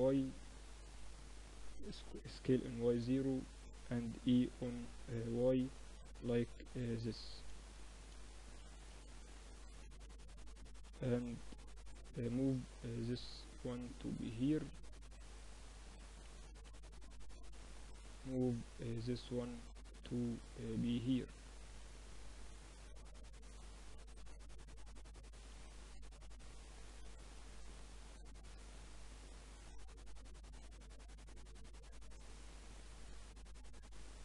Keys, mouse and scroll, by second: 1.1 s, 3.3 e, 6.3-8.8 drag, 6.6-10.0 typing, 11.3-15.4 drag, 15.4-18.1 middle drag, 15.7 a, 16.6 b, 18.1-19.8 drag, 19.9 z, 20.5 z, 20.9 a, 21.8 b, 23.3 click, 24.2 click, 24.6 a, 25.3 b, 26.5-28.0 drag, 27.2 z, 28.1-30.3 middle drag, 30.3 Tab, 30.8-33.8 middle drag.